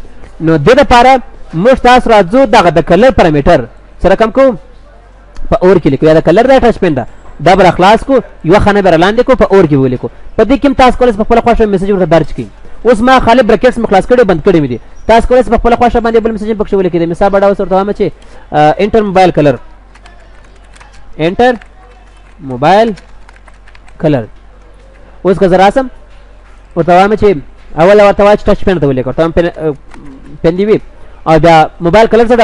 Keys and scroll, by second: 7.6 ctrl+x, 9.2 ctrl+x, 9.8 ctrl+v, 24.6 ctrl+s, 25.6 ctrl+w.